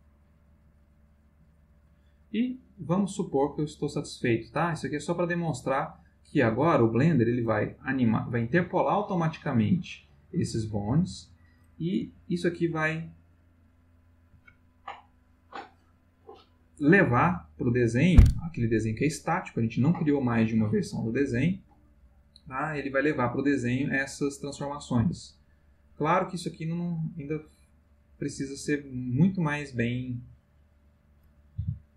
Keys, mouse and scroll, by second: 12.0 space, 12.7 space, 25.0 Escape, 25.6-30.3 drag, 31.0 click, 31.5 r.